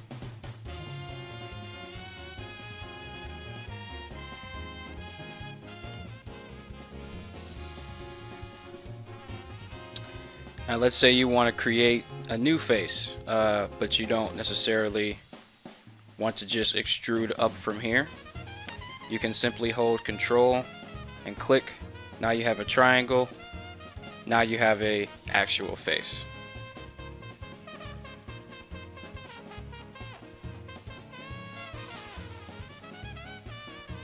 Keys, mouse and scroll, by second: 18.4 ctrl+z, 28.4-33.7 middle drag, 33.7-34.0 scroll up 1.